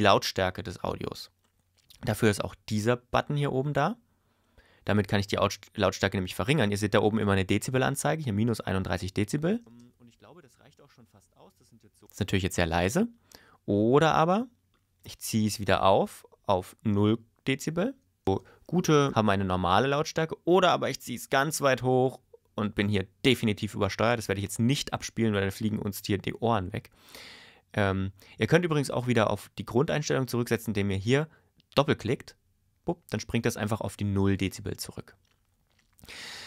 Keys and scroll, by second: 9.6 space, 12.1 space, 18.2 space.